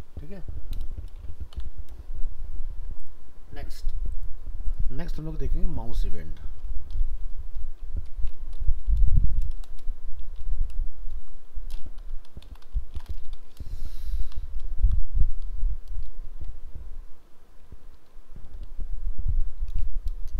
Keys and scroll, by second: 11.1 shift+Right.